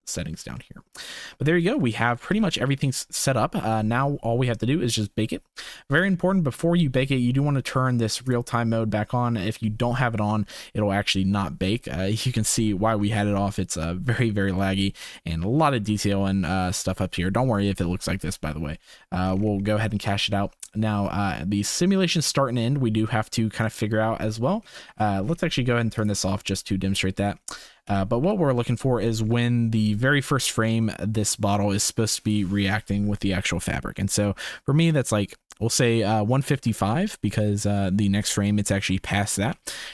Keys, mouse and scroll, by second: 0.6 click, 1.1 shift+click, 1.9 shift+click, 2.3 ctrl+s, 2.6 click, 3.1 click, 3.7 shift+drag, 6.1-6.4 middle drag, 12.5 ctrl+s, 14.6-15.6 drag, 15.7 ctrl+s, 20.1 middle click, 26.0-27.3 drag, 27.8 KP_1, 28.2 KP_3, 29.2 shift+middle click, 34.0 Left, 34.4 Right, 35.2 Right, 36.7 Left, 37.2 Right, 39.5 Left.